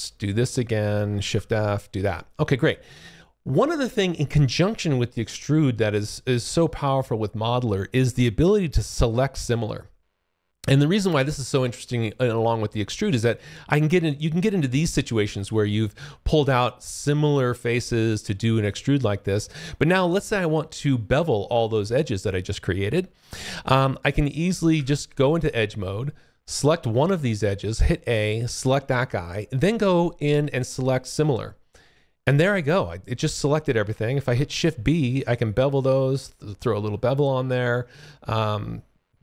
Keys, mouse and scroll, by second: 1.2 shift+f, 1.3 click, 2.2 alt+click, 8.7 alt+click, 9.3 alt+middle click, 10.6 alt+click, 15.9 alt+click, 17.9 alt+click, 25.4 click, 26.5 click, 27.7 a, 28.2 click, 28.4 a, 31.0 click, 34.1 shift+b, 34.5 click, 36.0-37.1 scroll up 3.